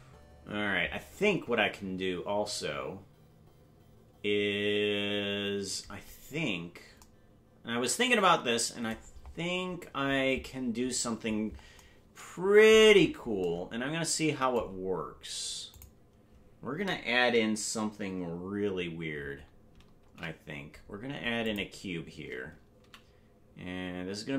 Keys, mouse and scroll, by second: 9.1-10.2 scroll up 6, 12.9-13.4 scroll down 4, 15.7 click, 19.9 shift+a, 22.8 s.